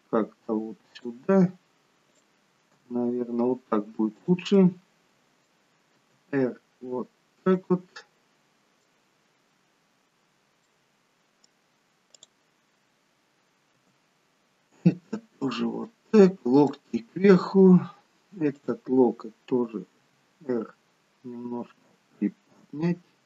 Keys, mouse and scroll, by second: 2.5 click, 2.8 g, 4.5 middle click, 5.9 r, 7.9 middle click, 12.4 middle click, 12.5 click, 13.8 r, 15.8 middle click, 18.5 click, 19.9 r.